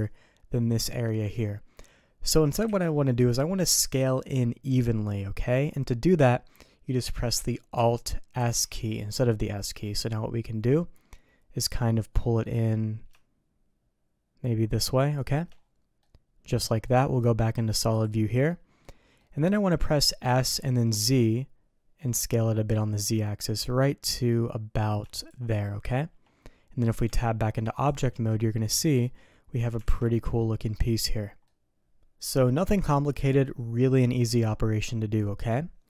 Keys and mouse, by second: 2.6 ctrl+z, 8.3 alt+s, 16.0 click, 16.1 middle click, 17.9 click, 18.4 middle click, 19.1 middle click, 20.2 s, 27.0 Tab, 28.3 click, 29.8 alt+a, 30.1 drag, 31.4-32.1 drag, 31.8 ctrl+s, 32.1-33.4 middle drag.